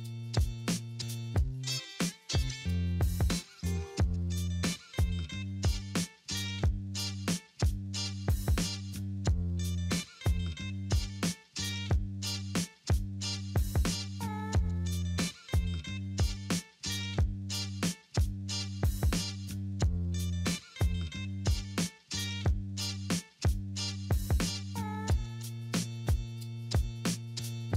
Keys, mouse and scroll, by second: 7.4 double click, 13.9 middle click, 14.3-14.8 scroll up 1, 14.8 alt+middle click.